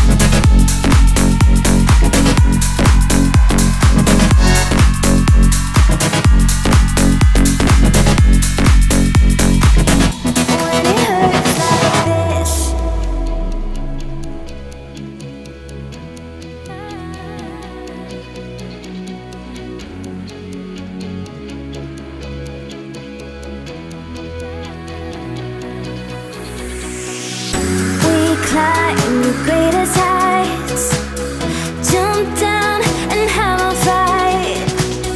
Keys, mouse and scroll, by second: 1.3-2.4 alt+shift+click, 3.7-4.8 alt+scroll down 1, 4.8 alt+scroll up 1, 6.8-7.3 alt+scroll up 2, 8.3 click, 9.1 alt+scroll down 1, 9.4-10.8 alt+scroll up 2, 11.9 alt+Num_Lock, 11.9 alt+scroll up 1, 12.0 alt+scroll down 1, 14.3-16.8 drag, 17.2-19.2 alt+drag, 19.2-20.0 click, 20.2 right click, 21.3 click, 23.7 click, 25.0 alt+scroll up 1, 26.6 click, 29.1 alt+scroll up 1, 30.0 click, 30.6 alt+scroll down 1, 33.5 click.